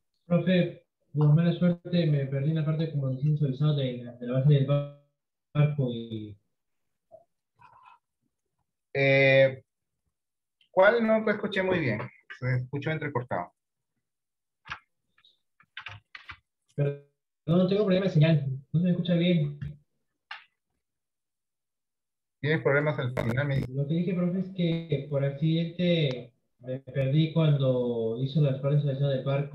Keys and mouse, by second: 26.1 middle click, 27.3-29.5 middle drag.